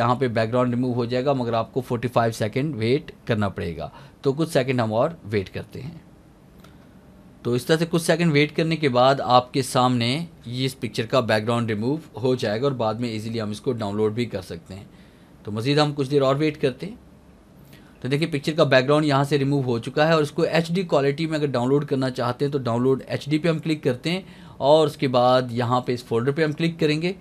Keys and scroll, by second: 17.3 alt+a.